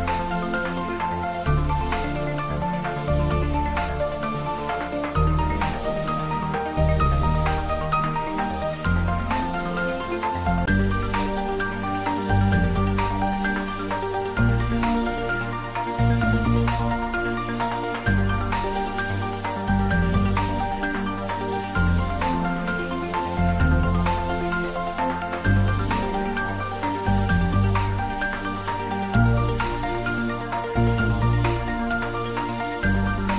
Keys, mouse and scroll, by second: 1.0 click, 2.2 scroll down 1, 2.6-3.2 middle click, 3.2 Tab, 3.8 scroll up 1, 4.3 Tab, 4.9 ctrl+z, 6.3-7.5 scroll up 1, 7.5-8.2 scroll down 1, 8.3-9.1 click, 11.0 Return, 12.4 click, 14.1-15.8 typing, 16.1 Return, 17.2 scroll down 1, 18.3-18.9 middle click, 19.4 click, 20.7-21.8 right click, 21.1 click, 22.9 Tab, 23.5-23.8 scroll up 1, 25.6-26.9 drag, 28.7 8, 29.1 Return, 30.0 scroll down 1, 30.5-32.4 middle drag, 33.0 click.